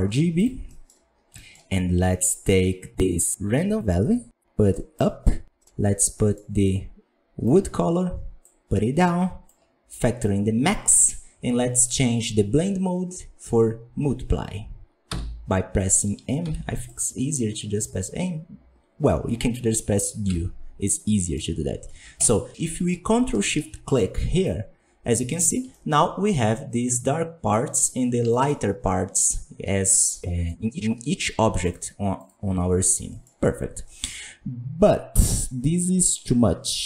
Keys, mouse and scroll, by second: 16.4 m, 22.1 ctrl+shift+click, 24.4-25.4 middle drag, 25.4-27.6 scroll up 6, 25.7 shift+middle drag, 27.6-28.3 scroll down 4, 28.3 shift+middle drag, 28.5 scroll up 3, 30.8 scroll down 3, 31.6 right click, 32.1 right click.